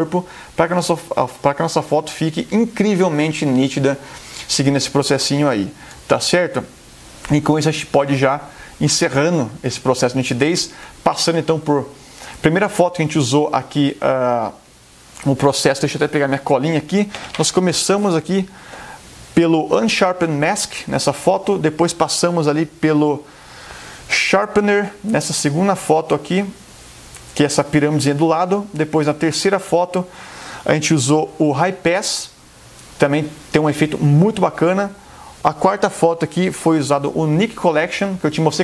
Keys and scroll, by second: 0.7 super+space, 6.1 super+0.